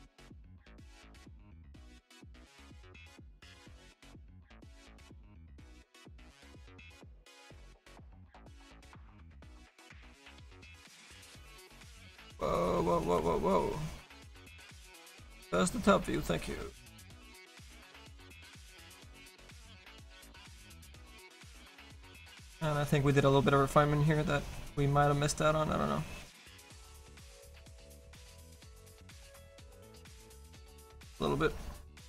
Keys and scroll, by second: 3.0 Escape, 17.2 s, 29.8 s.